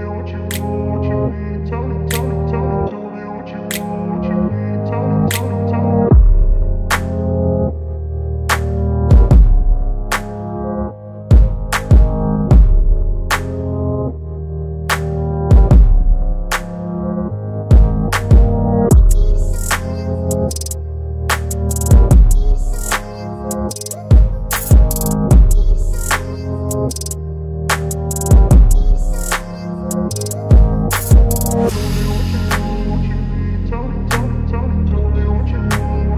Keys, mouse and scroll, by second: 12.1 ctrl+alt+click, 16.7 alt+click, 16.8 ctrl+alt+g, 18.6 click, 19.8 alt+shift+c, 20.3 alt+i, 20.5 r, 21.7 alt+space, 22.2 alt+shift+t, 23.5 alt+Return, 26.0 alt+v, 26.3 ctrl+alt+t, 28.3-29.9 alt+drag, 35.3-36.1 alt+drag.